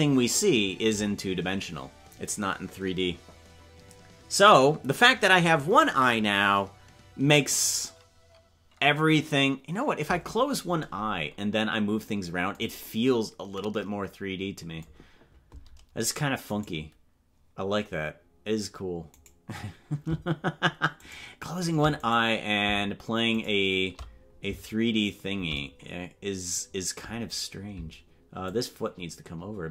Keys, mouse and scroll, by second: 16.8-18.0 right drag, 21.3-21.8 shift+right drag, 23.6-23.9 shift+right drag, 28.4-29.7 shift+drag.